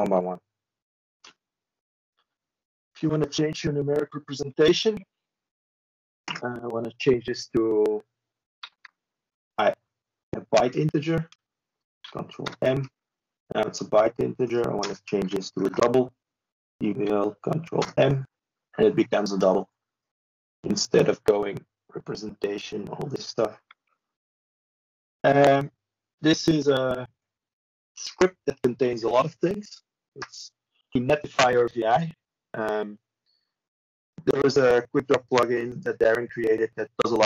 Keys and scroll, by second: 28.1 ctrl+space, 29.6 ctrl+a.